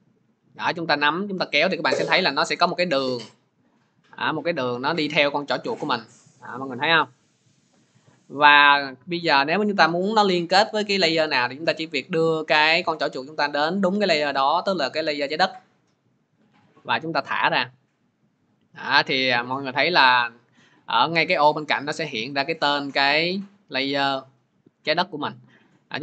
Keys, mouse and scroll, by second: 17.1 click, 22.3 click, 22.8 click.